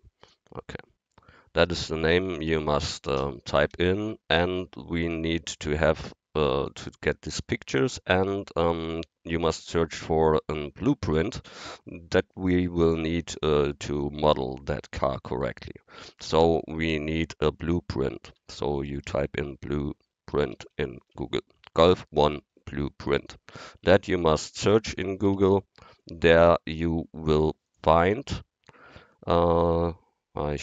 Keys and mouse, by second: 3.1 space, 18.3 b, 18.6 l, 18.9 u, 19.1 e, 20.4-21.2 typing, 23.9 Tab, 25.3 g.